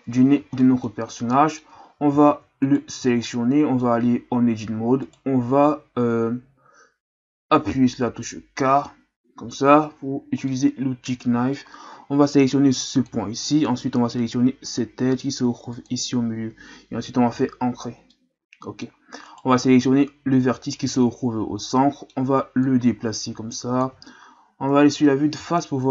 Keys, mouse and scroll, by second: 0.2-0.6 scroll up 3, 0.6-0.9 middle drag, 0.9-1.3 scroll up 1, 1.3-1.8 middle drag, 1.8-2.6 scroll up 3, 2.6 right click, 3.0 Tab, 3.3 middle click, 4.0-5.0 scroll up 1, 5.0 right click, 9.3 k, 10.0-10.5 scroll down 1, 10.5-13.5 middle drag, 18.1-19.3 middle drag, 19.3 right click, 19.8-21.0 scroll down 5, 21.0-21.7 scroll up 3, 21.7 middle click, 22.6-24.7 drag, 24.7 KP_1.